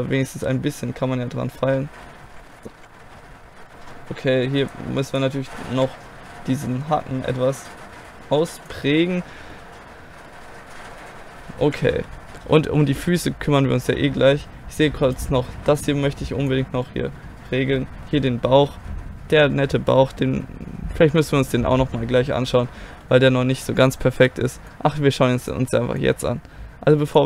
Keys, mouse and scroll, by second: 1.6 middle click, 2.3 KP_1, 2.5 right click, 2.8 KP_1, 2.9 g, 3.2 right click, 3.3 click, 3.7 KP_1, 3.8-5.8 drag, 5.8 KP_1, 6.7 g, 6.9 click, 7.0 middle click, 9.5 middle click, 11.6 middle click, 11.7 KP_1, 12.8 middle click, 15.1-16.9 right drag, 15.8-17.7 drag, 16.9 middle click, 24.2-25.9 right drag, 24.7-25.9 drag, 26.0-27.2 drag.